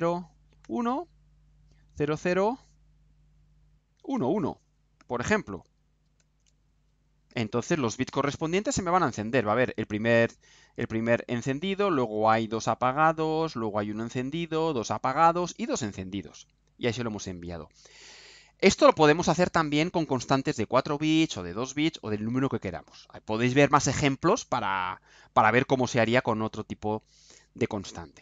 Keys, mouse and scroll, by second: 0.6 1, 1.9 0, 3.9 1, 6.1 ctrl+u.